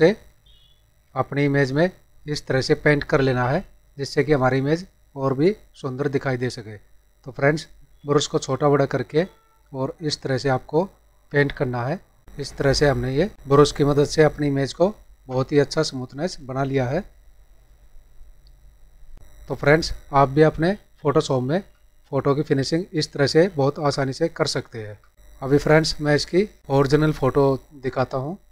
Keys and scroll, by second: 21.5 ctrl+-, 25.1 ctrl+=.